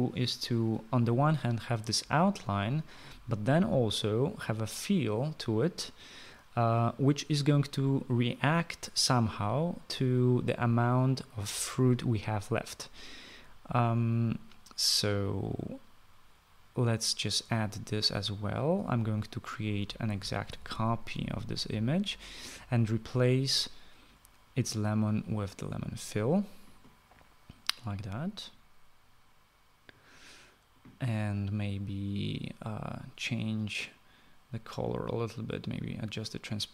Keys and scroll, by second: 21.4 ctrl+c, 21.7 ctrl+v.